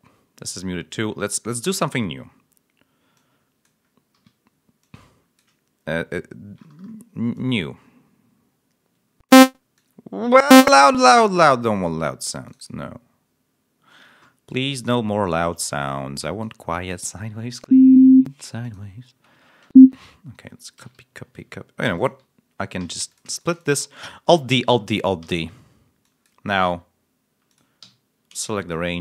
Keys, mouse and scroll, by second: 0.5-0.8 scroll up 2, 1.0 scroll down 2, 1.3 scroll up 2, 1.4 scroll down 2, 1.9 scroll down 2, 3.0 click, 4.1 d, 4.7 click, 6.2 ctrl+scroll up 1, 7.2-9.4 drag, 9.6 click, 11.6 click, 12.4 click, 14.6 click, 15.1 click, 16.1 click, 17.5 l, 19.1 space, 20.7 ctrl+c, 21.8 g, 21.9 click, 22.7 s, 23.0 shift+click, 23.2 shift+right click, 24.2 alt+d, 25.9 click, 27.4 click, 27.7 r, 28.3 click, 28.8 right click.